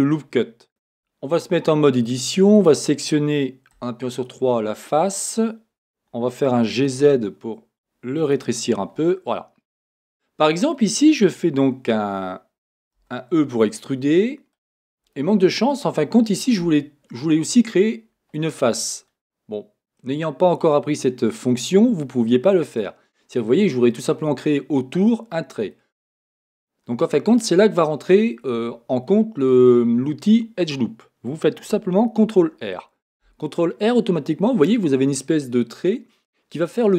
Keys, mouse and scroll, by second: 0.8 Tab, 2.5-3.7 drag, 3.7 3, 4.1-6.6 drag, 6.6 g, 8.4 click, 9.1-14.7 middle drag, 12.7-13.0 scroll up 2, 13.0 e, 14.7 click, 15.1-25.7 middle drag, 22.8-23.3 scroll up 2, 23.3-25.7 scroll up 1, 28.7 middle click, 34.0 ctrl+r.